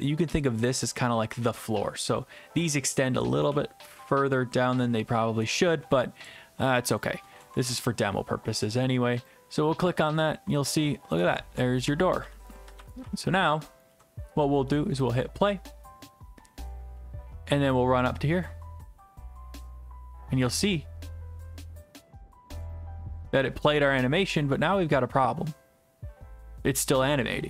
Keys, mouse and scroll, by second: 0.0-2.3 typing, 2.1-3.5 right drag, 3.5-6.3 typing, 7.0 right click, 7.6 ctrl+s, 9.3 click, 9.8-14.3 typing, 13.8 right click, 15.1 click, 15.8 click, 17.5-18.0 typing, 20.1-21.1 typing, 23.9-25.4 typing.